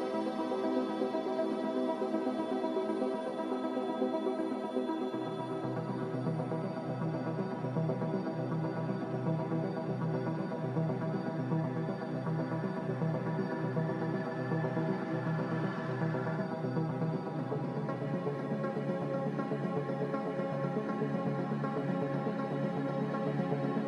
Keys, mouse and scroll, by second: 4.6 1, 5.4 Return, 18.1-19.0 typing, 21.6 typing, 22.1 Return.